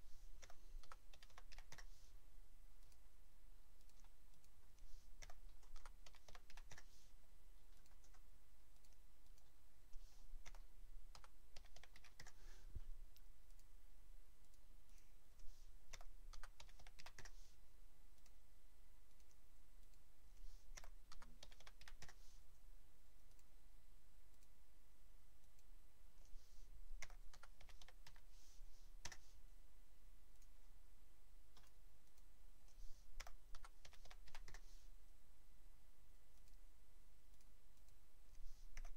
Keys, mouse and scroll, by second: 0.4-1.5 typing, 1.7 KP_Enter, 2.8 click, 3.8 click, 4.3 click, 5.2-6.5 typing, 6.7 KP_Enter, 7.7 click, 8.7 click, 9.2 click, 10.4-11.9 typing, 12.2 KP_Enter, 13.5 click, 14.4 click, 14.9 click, 15.9-17.0 typing, 17.2 KP_Enter, 18.1 click, 19.1 click, 19.8 click, 20.7-21.8 typing, 22.0 KP_Enter, 23.3 click, 24.3 click, 25.4 click, 27.0-28.0 typing, 29.0 KP_Enter, 30.3 click, 31.6 click, 32.0 click, 33.2-34.3 typing, 34.5 KP_Enter, 36.3 click, 37.3 click, 37.7 click, 38.7-38.9 typing.